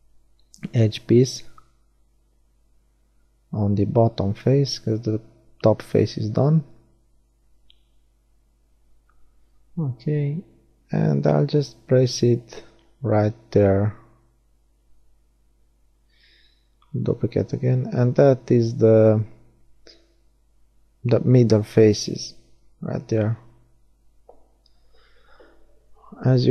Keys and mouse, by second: 6.9 KP_3, 8.4 r, 12.6 shift+d, 13.4 click, 14.2 r, 21.7-22.8 middle drag, 23.6-26.3 middle drag, 26.3-26.5 drag.